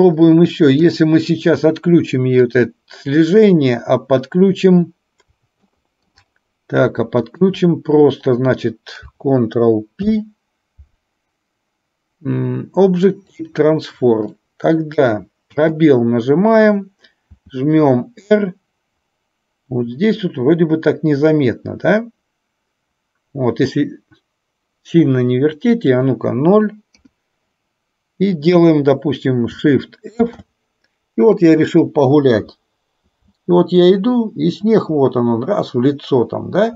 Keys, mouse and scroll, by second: 0.9 click, 2.6 click, 5.7-6.2 middle drag, 7.2 shift+click, 10.1 ctrl+p, 14.5-15.2 middle drag, 15.6 space, 17.4 r, 27.1 KP_0, 30.4 shift+f.